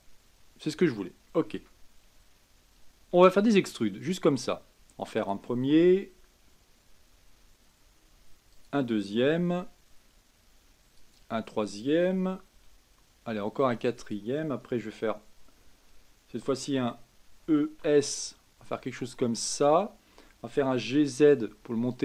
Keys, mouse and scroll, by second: 1.5 KP_1, 3.0 e, 5.9 e, 9.4 e, 12.5 e, 17.4 e, 20.5 g.